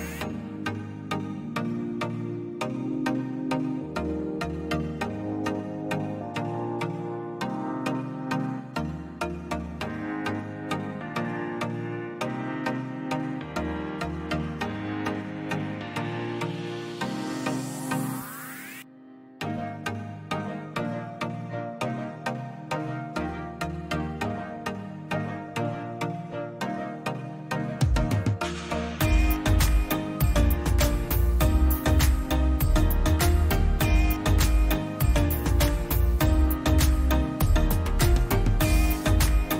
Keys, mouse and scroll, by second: 1.6 ctrl+a, 9.0 click, 9.4 Right, 10.1 click, 10.3-10.7 Right, 10.8 Left, 11.0-11.4 Left, 11.7 Up, 12.0 click, 15.5 click, 20.7 click, 27.6 click, 28.7-29.5 drag, 31.7-33.5 drag, 35.7 click, 36.2 click, 36.7 click, 37.3 click.